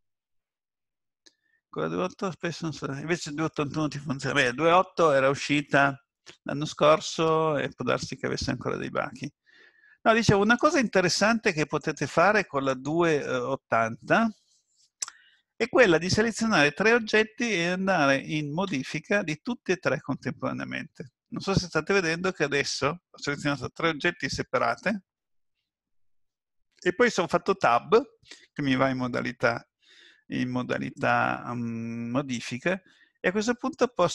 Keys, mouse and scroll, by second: 10.6 click, 11.8 shift+click, 18.7 Tab, 32.5 middle click.